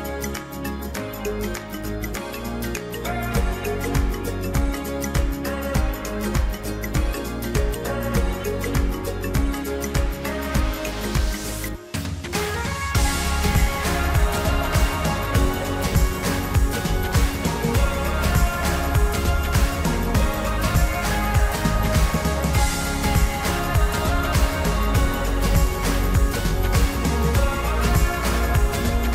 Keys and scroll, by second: 12.0 ctrl+alt+shift+e.